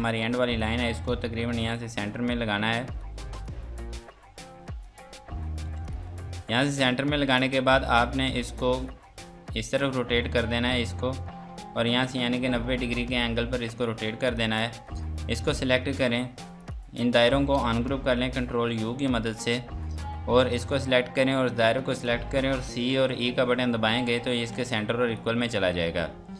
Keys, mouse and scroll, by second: 5.2 scroll down 1, 5.6 F2, 5.9 click, 6.4 Escape, 7.3 click, 14.3 click, 20.4 click, 21.9 click, 22.9 c, 24.7 click.